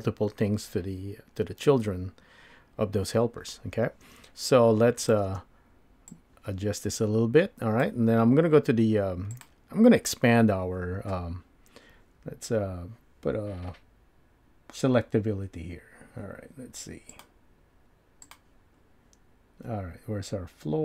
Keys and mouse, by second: 17.2-18.7 drag.